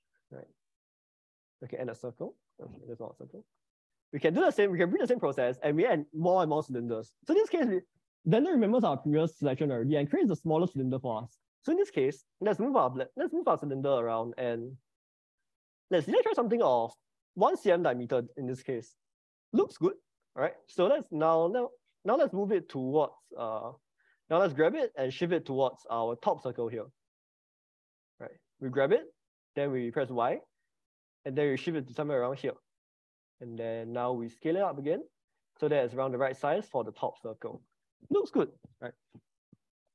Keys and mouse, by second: 3.0 ctrl+z, 3.9-6.5 drag, 16.1-18.2 drag, 21.3 Escape, 25.1 g, 25.8 y, 27.3 click, 28.9 g, 30.0 y, 34.1 click, 34.5 s.